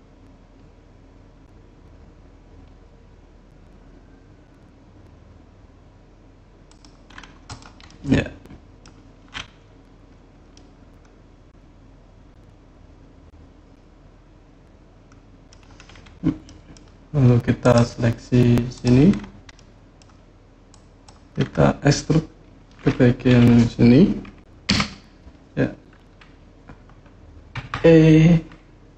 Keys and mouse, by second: 6.4 click, 7.2 click, 7.6-8.6 middle drag, 10.3-15.3 middle drag, 16.2 middle click, 17.4 click, 18.5 click, 19.3 middle click, 20.5 click, 24.4 KP_3, 27.3 e.